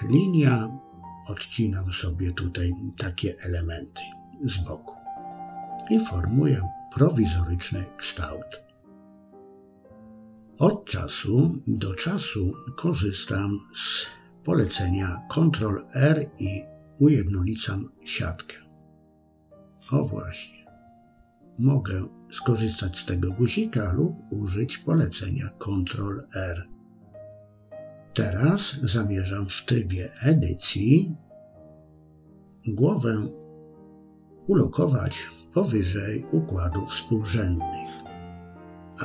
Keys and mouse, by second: 1.8-3.2 drag, 4.0 middle click, 5.3 KP_3, 6.1 shift+middle click, 8.8 Tab, 15.2 Tab, 18.7-20.7 drag, 21.2-23.7 middle drag, 24.3 KP_3, 25.9 Tab, 29.8 a, 32.3 g, 36.5 Tab.